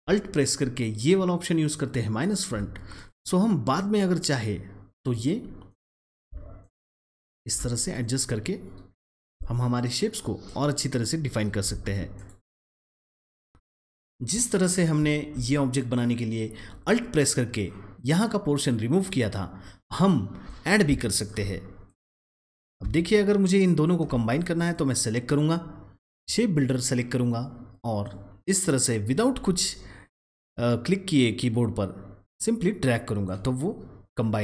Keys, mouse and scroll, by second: 5.0 double click, 5.6 click, 6.6 alt+shift+click, 7.7 double click, 7.9 click, 8.9-11.6 drag, 11.9 ctrl+z, 12.0 click, 13.5-13.8 alt+scroll up 1, 14.0-14.9 alt+scroll down 1, 15.0 alt+scroll down 1, 20.4-34.4 alt+drag.